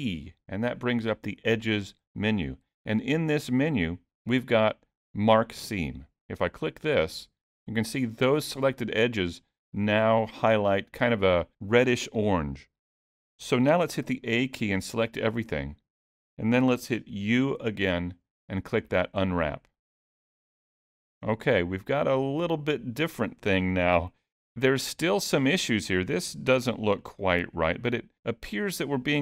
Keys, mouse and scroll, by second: 9.2 middle click, 10.2-11.0 scroll up 1, 11.0 middle click, 14.1 a, 14.8 middle click, 17.3 u, 25.0-26.0 scroll up 4, 27.0-27.6 scroll down 2.